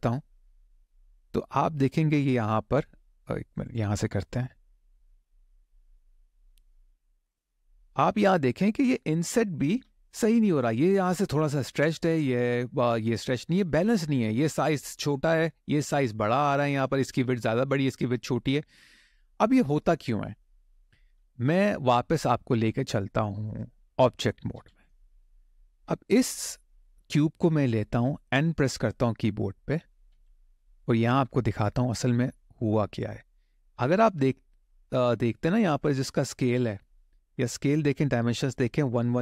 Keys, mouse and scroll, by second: 1.7-2.0 scroll up 1, 2.2 click, 3.4 click, 4.7-6.8 drag, 7.4 click, 7.9 middle click, 9.1 shift+middle click, 13.5 middle click, 18.2-18.6 scroll down 1, 18.6 middle click, 20.3 shift+middle click, 24.3 Tab, 25.4 click, 27.2 middle click, 29.9 n.